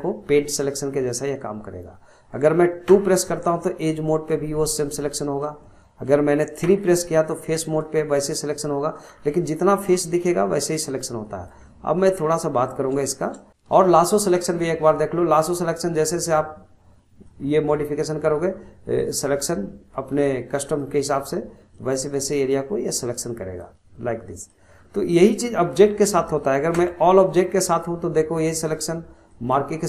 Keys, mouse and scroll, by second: 2.9 2, 3.6-5.6 drag, 5.6-6.6 middle drag, 6.6 3, 7.3-9.1 drag, 9.1 scroll down 1, 9.3-10.3 middle drag, 10.3-10.8 scroll up 1, 10.8 click, 11.7 middle click, 12.2-12.6 scroll up 1, 12.6 scroll down 2, 13.1 shift+middle click, 13.5-15.4 drag, 17.7-19.0 middle drag, 19.0 click, 21.7 click, 23.6 click, 24.7 scroll down 2, 25.1 middle click, 25.4-25.7 scroll down 1, 25.7-26.8 middle drag, 26.8 Tab, 27.0 scroll down 1, 27.3-27.8 middle drag, 27.8 click, 29.3 click.